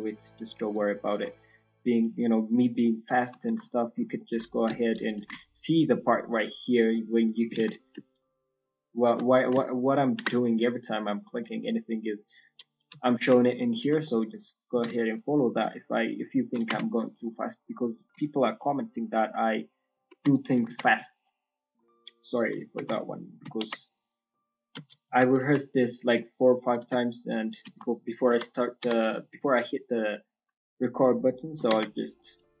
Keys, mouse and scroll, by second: 1.2 scroll, 2.8 middle click, 2.8 scroll down 2, 3.4 shift+middle click, 3.7 middle click, 4.1 ctrl+middle click, 5.0 ctrl+click, 6.8 middle click, 7.5 ctrl+z, 8.4 ctrl+click, 9.2 middle click, 10.0 ctrl+click, 10.4 middle click, 10.8-11.5 scroll down 7, 11.3 middle click, 11.7 scroll up 4, 11.9-12.3 scroll down 2, 12.6-14.0 typing, 12.8 scroll down 1, 14.0 shift+middle click, 14.0-14.8 scroll, 16.9 Tab, 16.9 scroll, 16.9 g, 17.0 scroll down 3, 17.2 middle click, 17.2 scroll down 1, 17.7 scroll down 1, 18.1 shift+middle click, 18.5 middle click, 20.1 Tab, 20.3 middle click, 20.6 Tab, 20.8-21.3 scroll down 3, 21.6-22.7 scroll up 7, 22.7 Tab, 22.9 middle click, 23.9 click, 24.7 KP_1, 25.0 KP_3, 25.3 KP_1, 26.2 scroll up 1, 28.8 g, 31.6 Tab, 31.8-32.6 scroll down 3, 32.1 middle click.